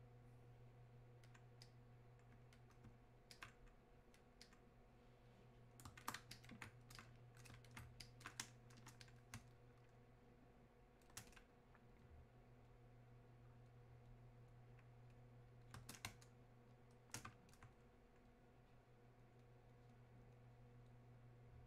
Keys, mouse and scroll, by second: 9.4 space, 10.3 click, 10.4 space, 11.3 space, 11.3-16.1 drag, 16.1 space, 17.5-21.6 alt+drag.